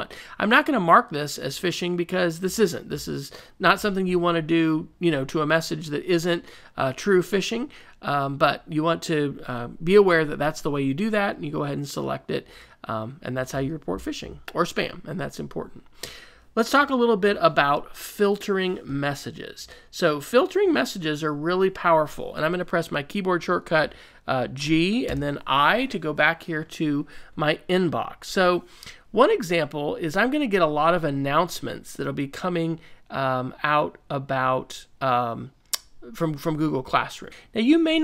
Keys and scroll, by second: 24.6 g, 25.0 i.